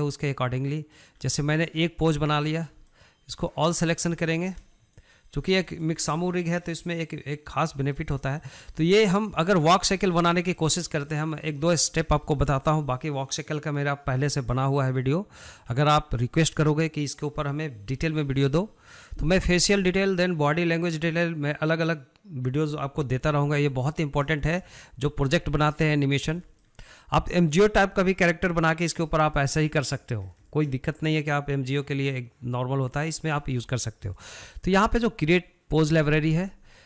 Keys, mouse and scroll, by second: 0.4-1.5 middle drag, 1.5-1.8 scroll up 3, 1.8-2.5 shift+middle drag, 2.5 scroll down 1, 2.6-3.6 shift+middle drag, 3.6 click, 4.1 scroll up 2, 4.4-5.3 shift+middle drag, 5.3 ctrl+click, 5.7 scroll down 3, 6.0-7.6 shift+middle drag, 7.6-9.1 drag, 9.1 shift+middle click, 9.7-10.0 scroll up 3, 10.0-26.1 shift+middle drag, 26.1 scroll down 1, 26.3-36.8 shift+middle drag.